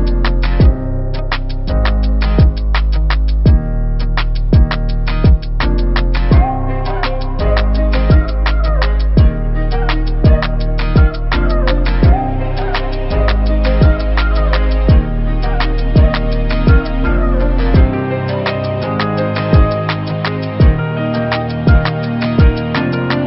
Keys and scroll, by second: 1.6 ctrl+=, 2.4 space, 19.5 ctrl+-.